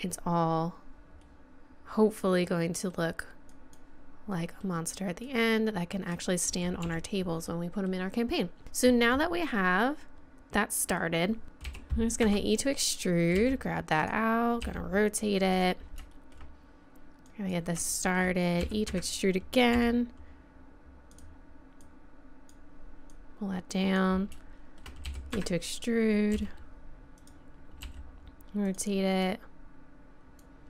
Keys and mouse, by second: 1.2 middle click, 2.2 middle click, 2.9 middle click, 3.5 middle click, 4.4-6.8 middle drag, 6.8 z, 7.5 middle click, 10.9 middle click, 11.4 right click, 11.7 e, 13.0 click, 13.4 g, 14.6 r, 17.3 click, 18.7 e, 19.7 r, 21.9-24.0 drag, 24.4 click, 24.4 middle click, 24.5 click, 25.1 e, 26.4 g, 27.8 r, 29.2 click.